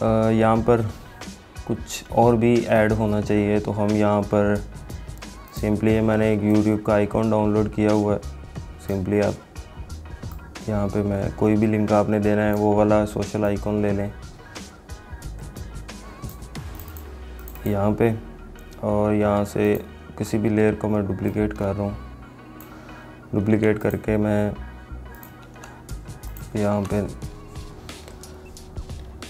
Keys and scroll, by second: 25.7 ctrl+z, 26.9 ctrl+a.